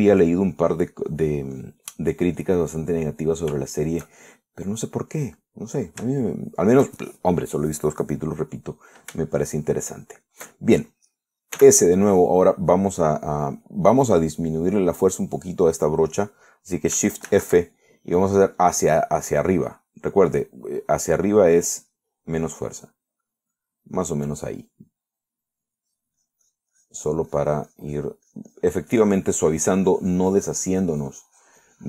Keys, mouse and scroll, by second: 0.6 click, 1.5 click, 2.3 click, 2.8 click, 3.4 click, 4.2 click, 5.1-7.0 shift+middle drag, 7.5 shift+middle click, 10.4-12.1 shift+middle drag, 12.8 s, 18.5 shift+f, 24.7 click, 27.0-31.8 drag.